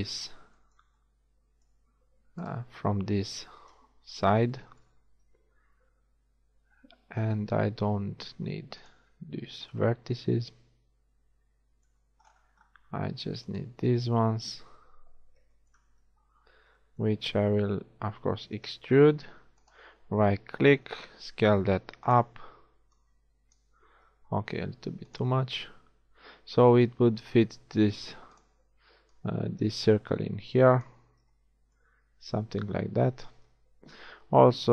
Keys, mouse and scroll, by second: 3.8 KP_1, 4.3 z, 8.1 x, 9.6 z, 13.6-14.7 alt+right drag, 14.8 alt+KP_1, 16.0 z, 18.7 e, 21.5 s, 23.0-25.4 drag, 24.1 s, 27.8 s, 29.2 click, 32.7 z, 33.6 KP_1.